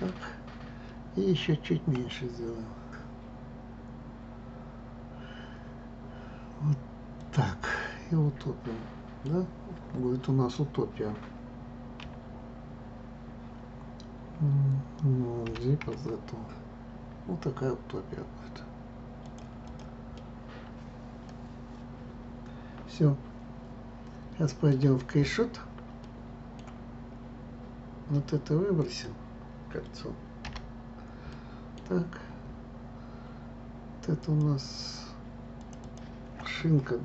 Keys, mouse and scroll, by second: 0.3 scroll, 1.9 s, 7.7-10.7 middle drag, 15.4 g, 19.6 click, 20.1-23.2 middle drag, 26.0-28.7 middle drag, 28.7 click, 30.4 Delete, 31.3-34.2 middle drag, 34.2 click, 35.5 click, 35.8-37.0 drag.